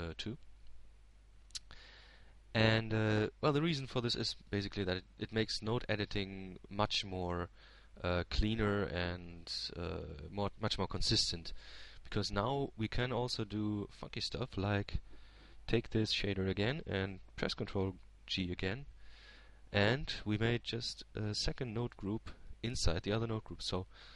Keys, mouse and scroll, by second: 6.5-8.6 drag, 16.8-18.4 drag, 20.0 click, 21.5 ctrl+g.